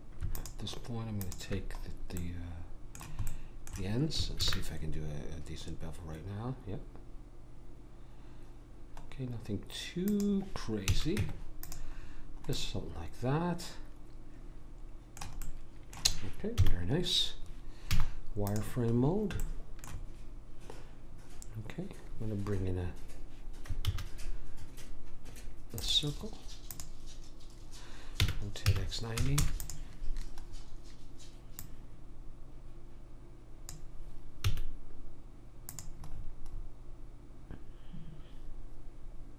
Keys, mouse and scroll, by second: 0.3 click, 2.2 middle click, 3.1-4.4 middle drag, 4.4 ctrl+b, 10.8 a, 11.1 Tab, 15.4-16.5 middle drag, 16.5 KP_1, 17.9 z, 23.8 shift+a, 28.2 r, 31.5 click, 34.4 s, 36.1 middle click.